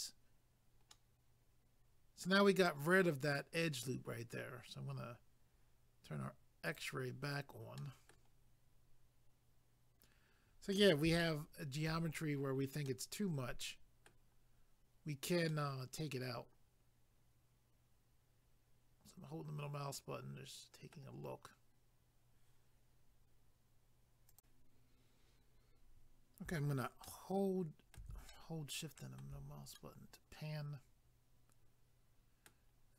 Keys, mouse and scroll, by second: 0.9 middle click, 6.7 click, 7.8 middle click, 8.3 scroll down 1, 11.2 shift+middle click, 12.3 scroll down 1, 12.9 middle click, 14.4 scroll down 1, 15.5 middle click, 24.3 click, 27.0 shift+middle click, 28.3 shift+middle click, 29.7 middle click, 32.7 scroll up 1.